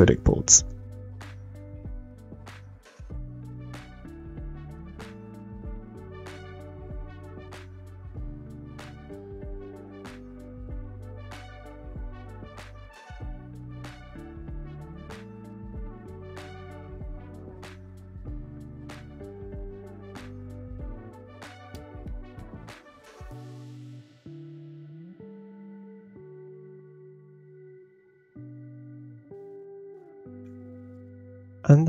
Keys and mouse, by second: 0.6 click, 1.2 middle click, 1.4 click, 2.5 r, 3.3 middle click, 3.5 middle click, 3.8 click, 5.1 shift+middle click, 5.5 g, 6.3 middle drag, 6.7 middle drag, 7.1 shift+middle click, 7.3 g, 8.5 g, 9.1 shift+middle click, 9.3 middle click, 9.4 shift+middle click, 9.7 click, 10.1 shift+middle click, 10.3 g, 11.1 click, 11.7 click, 12.4 shift+middle click, 12.6-16.1 typing, 12.8 shift+right click, 14.3 shift+right click, 15.8 shift+click, 16.6 click, 16.9 shift+middle click, 17.1 Tab, 17.3 shift+middle click, 17.7-19.7 typing, 19.0 ctrl+z, 20.1 click, 20.1 middle click, 20.1 right click, 20.3 Tab, 20.4-20.8 middle drag, 20.5 drag, 20.5 right drag, 21.1 Tab, 21.2-23.5 typing, 22.6 click, 22.7 middle click, 22.7 right click, 23.9 Tab, 24.1 Tab, 24.5 r, 24.9 g, 25.3 middle click, 25.8 Tab, 25.9 Tab, 26.0 shift+click, 26.3 r, 26.7 g, 27.1 g, 27.5 Tab, 28.7 middle click, 29.2 shift+middle click.